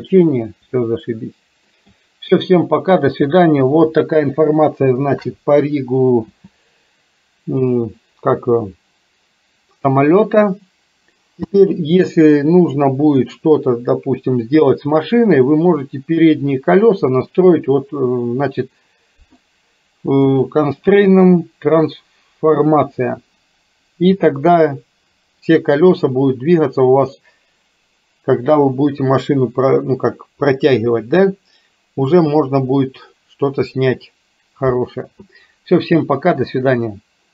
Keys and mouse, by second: 1.0 shift+middle click, 6.4 n, 11.5 space, 20.4-23.3 drag.